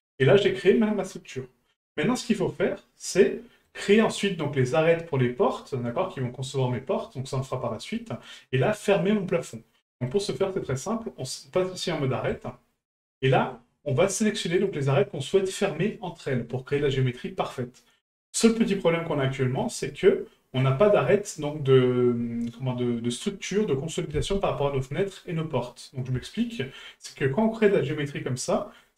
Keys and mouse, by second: 7.9-8.3 middle drag, 10.0 middle click, 12.3 click, 13.1-13.5 middle drag, 14.6 right click, 16.3-16.7 middle drag, 18.2-19.1 middle drag, 19.6 shift+middle drag, 20.0-20.6 middle drag, 24.4-25.0 middle drag, 26.3 shift+middle drag, 26.8-27.4 middle drag.